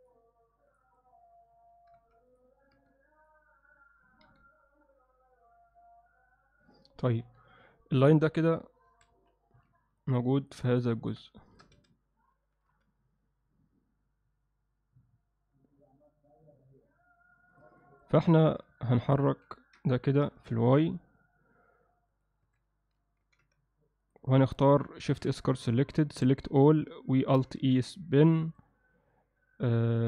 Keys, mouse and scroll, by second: 0.7 click, 2.0 x, 2.8 a, 3.2 click, 4.3 g, 7.3 KP_7, 8.9 a, 9.1 KP_Decimal, 10.0 ctrl+alt+middle click, 10.4 ctrl+middle click, 10.7 ctrl+middle click, 11.0 ctrl+middle click, 11.4 alt+shift+middle click, 11.8 a, 12.3 g, 17.8 ctrl+alt+middle click, 18.4 shift+middle click, 18.8 ctrl+middle click, 19.2 click, 19.6 ctrl+middle click, 20.1 g, 22.5 a, 23.2 g, 25.0 shift+s, 26.1 a, 27.6 alt+e.